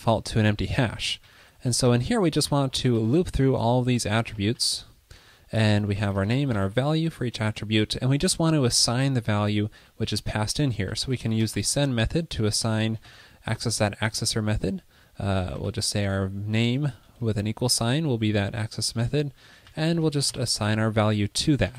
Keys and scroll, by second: 21.3 Right.